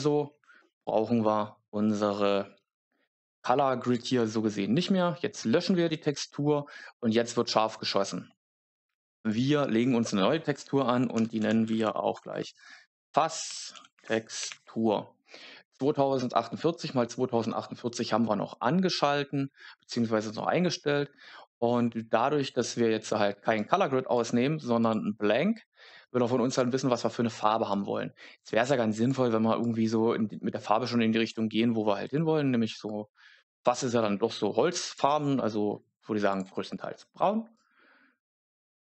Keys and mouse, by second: 4.7 click, 9.1-38.8 drag, 11.7 s.